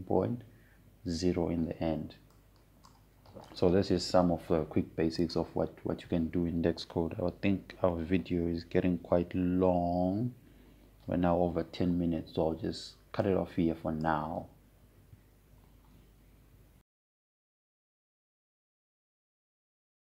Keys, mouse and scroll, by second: 4.1-6.9 drag, 14.9-18.2 drag, 19.6 click.